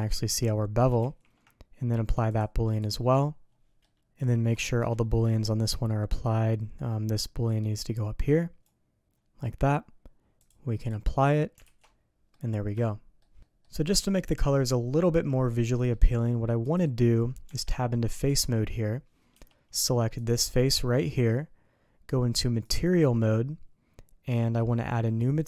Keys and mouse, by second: 0.1 ctrl+z, 1.0 shift+c, 2.4 click, 4.6 shift+middle click, 5.7 middle click, 7.4-8.7 drag, 10.4 click, 11.6 alt+a, 11.8 click, 12.8 shift+middle click, 13.4 middle click, 14.2-15.9 middle drag, 17.4 Tab, 18.2 Tab, 20.2-21.3 drag, 22.6 click.